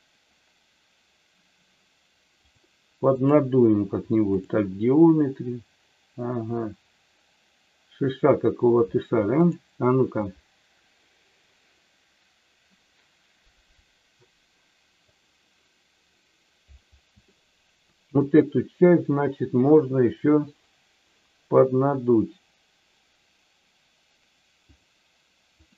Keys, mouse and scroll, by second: 2.3-4.5 drag, 9.3-11.5 drag, 15.0 click, 17.2-18.2 shift+middle drag, 24.7-25.7 drag.